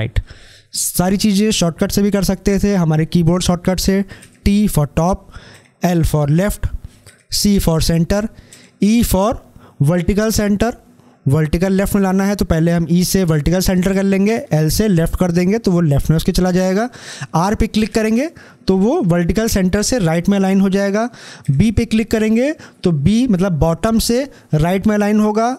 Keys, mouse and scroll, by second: 3.9 click, 4.1 t, 14.1 l, 17.6 r, 21.3 b.